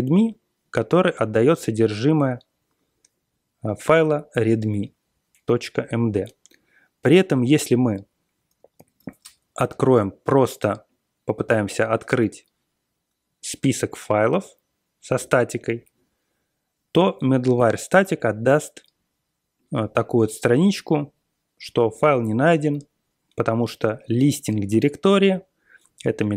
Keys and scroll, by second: 8.7 super+l, 11.9 BackSpace, 12.1 BackSpace, 15.1 Return.